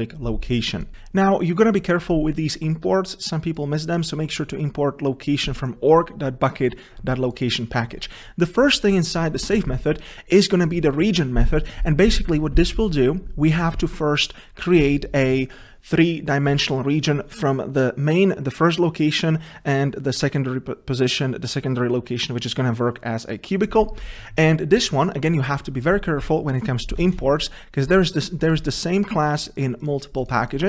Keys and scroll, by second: 9.6 Tab.